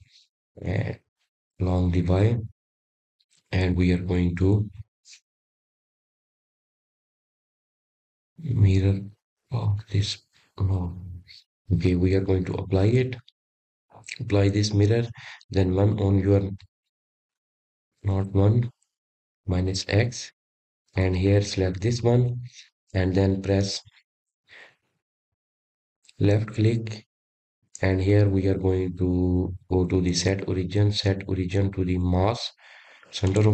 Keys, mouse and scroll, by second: 0.4 click, 1.5-4.6 drag, 4.9 click, 13.0 click, 14.7 click, 15.4-16.8 drag, 16.8-17.8 middle drag, 17.8-18.3 scroll down 3, 19.6 KP_1, 21.2-23.3 middle drag, 23.3 click, 24.0-24.9 scroll up 5, 24.9 click, 28.6-33.5 right drag.